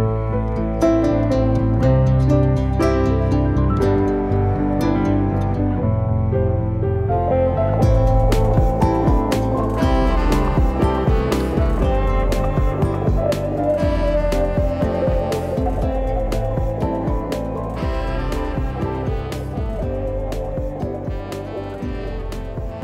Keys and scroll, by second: 2.7 F10, 9.1 F10, 11.1-12.8 typing.